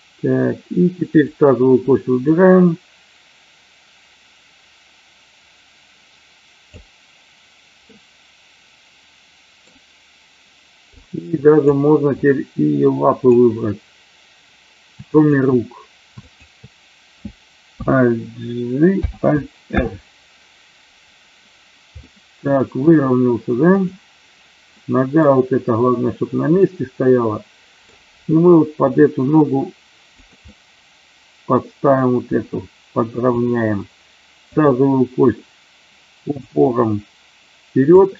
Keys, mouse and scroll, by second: 2.2-6.7 drag, 7.9-9.6 middle drag, 11.0-11.5 drag, 12.2-13.2 drag, 15.1 shift+click, 16.1 shift+click, 18.8 alt+j, 19.6 alt+r, 22.0 middle click, 23.6 click, 24.6-25.2 middle drag, 26.6-27.8 middle drag, 28.8 g, 30.5-31.9 middle drag, 32.1 g, 33.4 click, 36.4-37.9 drag.